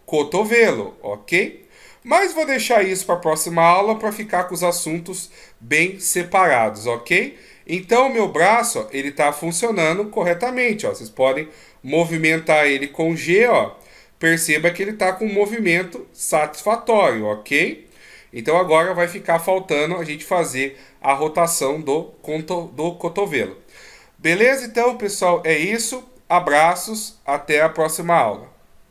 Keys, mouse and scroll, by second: 0.8-1.7 scroll down 1, 1.7-2.4 scroll down 1, 2.4 middle click, 4.1-4.6 shift+scroll down 4, 5.0 scroll down 3, 5.8 scroll down 1, 7.6 scroll up 2, 8.1 middle click, 11.1 g, 19.5 middle click, 22.3-22.7 scroll down 1.